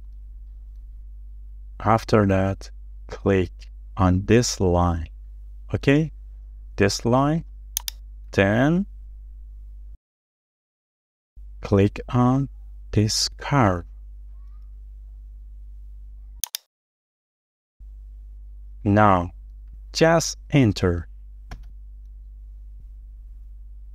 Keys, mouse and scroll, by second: 1.0-1.4 scroll up 1, 2.1 middle click, 3.1-4.1 scroll up 1, 8.9-9.2 scroll down 1, 9.9 shift+middle click, 20.7 scroll down 1, 21.5 shift+middle click, 22.9 Return.